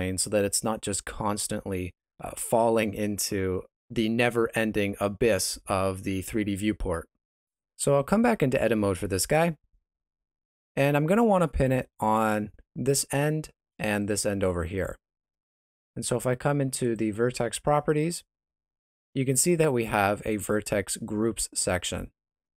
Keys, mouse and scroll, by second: 0.4 space, 1.0 middle click, 2.1 shift+z, 9.4 Tab, 10.7 ctrl+middle click, 12.2 alt+right click, 14.0 alt+shift+right click, 16.8 click.